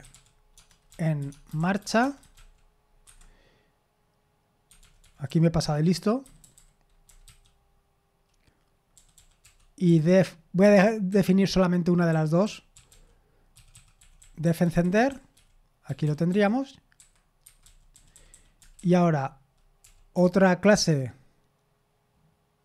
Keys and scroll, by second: 17.5-19.3 typing.